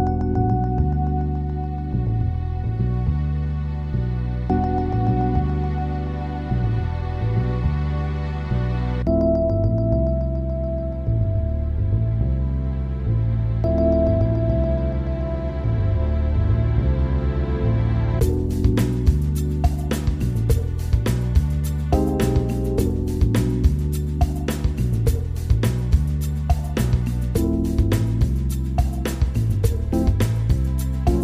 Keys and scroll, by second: 0.5 ctrl+[, 1.1 ctrl+=, 2.7 Up, 5.5 Up, 6.1 ctrl+=, 9.6 Up, 26.3 Caps_Lock.